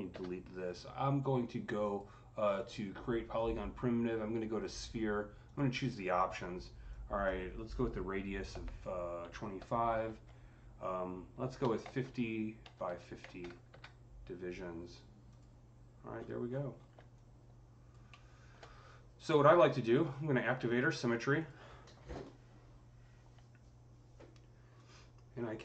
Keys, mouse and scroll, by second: 1.7 click, 5.3-9.9 drag, 8.3 KP_2, 9.4 KP_5, 9.9 Tab, 11.9 KP_0, 12.5 Tab, 12.7 KP_5, 13.1 KP_0, 13.5 KP_Enter, 15.1 click, 16.0 scroll up 5, 16.3 scroll down 8, 17.0-21.2 alt+drag, 17.9-23.7 alt+middle drag, 24.6-25.6 drag.